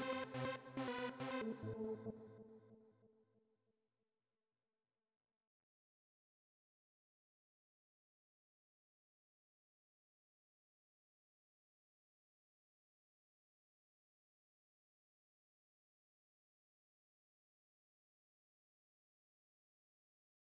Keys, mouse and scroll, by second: 1.8 click, 5.9 right click, 7.1 click, 8.4-10.4 typing, 11.5 click, 12.6 click, 13.7 Return, 15.6 click, 16.6 alt+Up.